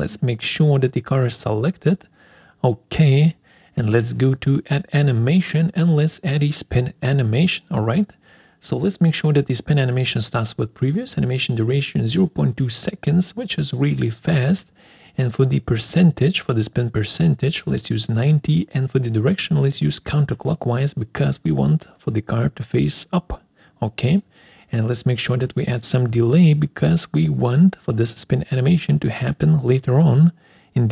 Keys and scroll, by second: 10.2-11.0 typing.